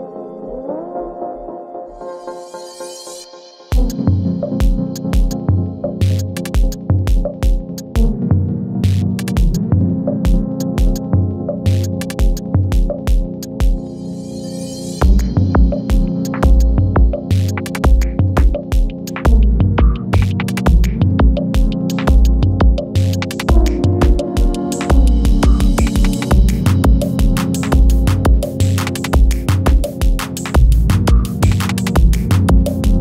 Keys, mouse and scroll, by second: 3.4 click, 4.2 F4, 5.7 space, 6.0 s, 7.1 click, 7.4 space, 8.7-9.9 drag, 11.3 F9, 12.4-16.3 drag, 15.1-15.7 shift+drag, 16.6-17.2 shift+drag, 19.1 space, 22.5 space, 23.0 click, 23.6 ctrl+a, 24.9 ctrl+shift+c, 25.7 Return, 26.8-27.4 drag, 28.8 ctrl+d, 30.2 click, 32.7-33.0 typing.